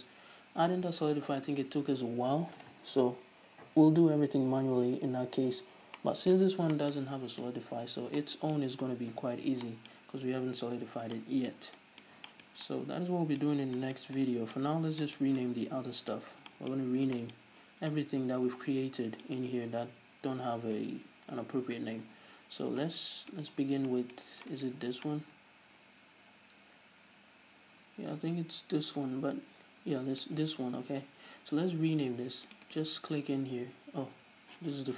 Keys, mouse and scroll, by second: 11.2-11.7 scroll up 2, 15.3 scroll down 1, 16.7-17.0 scroll up 1, 23.1 scroll down 1, 23.9-24.4 scroll up 1, 25.1-25.6 right drag, 25.6-33.1 middle drag, 33.1 click.